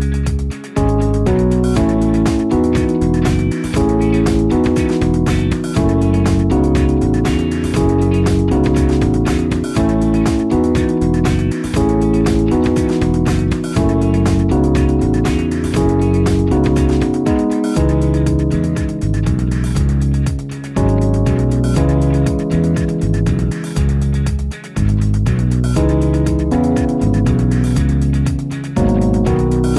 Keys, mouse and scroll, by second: 8.7 ctrl+c, 11.2 ctrl+v, 12.6 ctrl+v, 14.3 ctrl+v, 27.7 alt+KP_0.